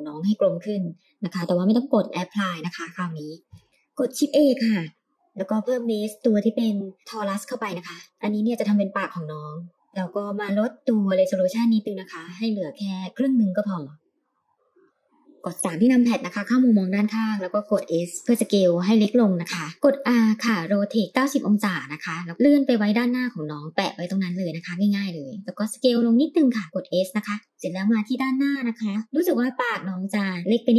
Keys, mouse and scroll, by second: 2.4-2.9 middle drag, 3.4 scroll up 1, 3.6 shift+a, 9.9 click, 12.0 click, 12.5 click, 12.7 click, 12.8 click, 13.0 click, 13.2 click, 13.7 click, 15.2 middle click, 15.3 KP_3, 15.6 s, 19.7 shift+middle click, 19.7 scroll up 2, 19.8 r, 22.3 g, 25.4 s, 27.4-28.4 middle drag, 28.7-29.3 scroll up 2, 30.2-30.7 shift+middle drag.